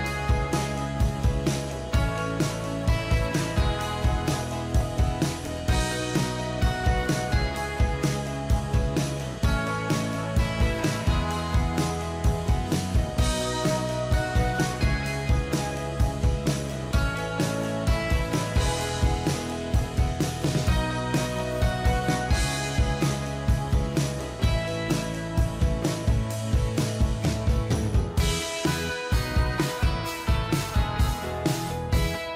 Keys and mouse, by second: 1.9 ctrl+-, 4.8 right click, 12.4 ctrl+click, 13.5 ctrl+t, 14.5 double click, 15.9 alt+click, 19.3 alt+click, 19.9 alt+click, 20.6 alt+click.